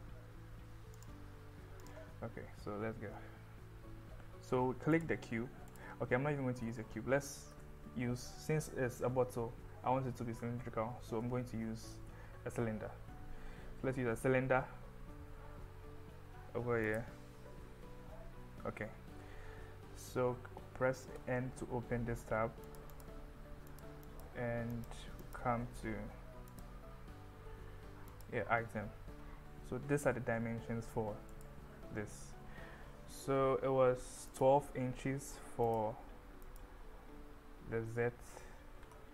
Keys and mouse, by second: 5.0 click, 7.6 Delete, 11.8 shift+a, 21.2 n, 22.7 click, 23.8 click, 24.1 click, 24.8 click, 25.2 click, 26.5 click, 28.2 click, 31.4 click, 34.5-35.8 drag, 36.5-39.1 drag.